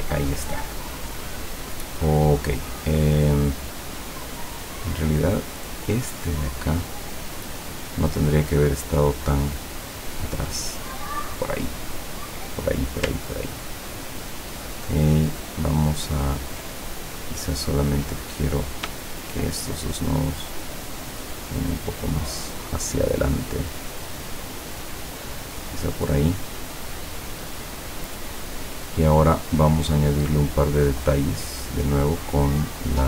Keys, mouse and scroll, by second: 4.6 click, 6.4 click, 10.3 click, 13.4-13.8 ctrl+scroll down 2, 15.5-15.8 ctrl+scroll up 2, 16.2 ctrl+scroll up 2, 17.1 ctrl+click, 17.5 ctrl+click, 18.6 click, 19.3 shift+click, 19.9-26.5 shift+drag, 30.2 click.